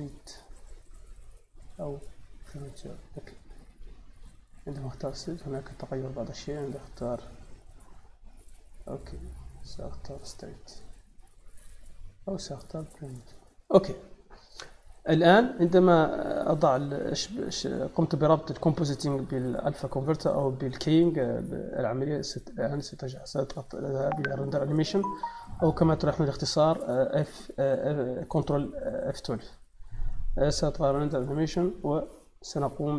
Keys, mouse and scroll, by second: 1.5 click, 2.4 click, 4.0 click, 4.5 click, 6.0 click, 7.7 click, 9.5 click, 10.0 click, 12.1 click, 13.0 click, 15.0 middle click, 16.8 middle click, 18.0 middle click, 23.6 click, 25.9 click, 29.5 click, 30.6 click, 31.3 click.